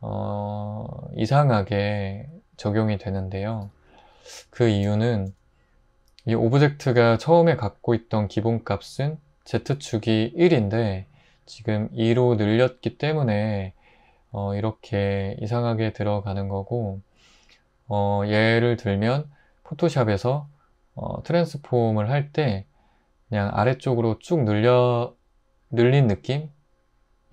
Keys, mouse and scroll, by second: 3.7 Tab.